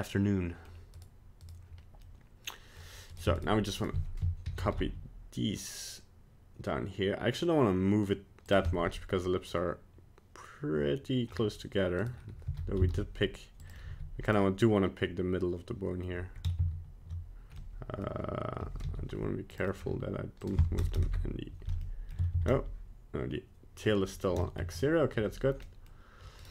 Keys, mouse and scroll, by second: 0.9 right click, 1.4 right click, 2.1 middle click, 3.1 right click, 3.4 shift+right click, 3.8 right click, 4.5 shift+d, 8.7 middle click, 11.3 middle click, 12.0 right click, 12.5 g, 13.9 g, 14.4 middle click, 16.6 ctrl+z, 17.6 middle click, 18.8 g, 19.7 middle click, 20.4 click, 21.8 middle click, 22.4 ctrl+z, 24.0 middle click, 24.4 shift+middle click, 24.8 right click, 25.6 middle click, 26.4 right click.